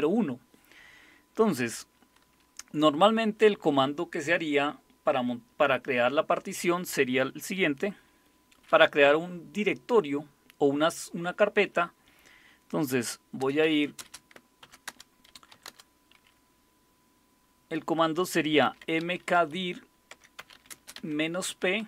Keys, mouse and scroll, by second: 13.2-15.8 typing, 18.4-21.8 typing.